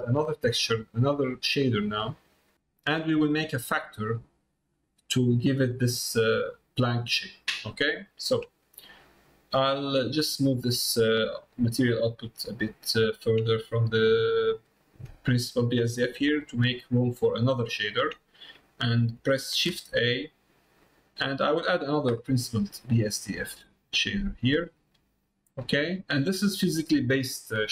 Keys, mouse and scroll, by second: 0.3 middle click, 1.5 click, 7.8 middle click, 8.6 middle click, 9.9-13.0 drag, 13.8 click, 15.0 middle click, 15.7 click, 17.9 middle click.